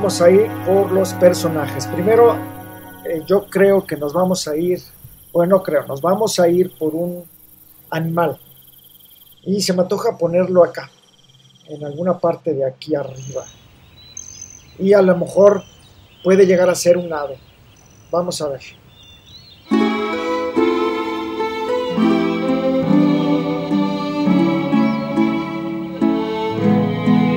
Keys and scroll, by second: 25.9 super+c.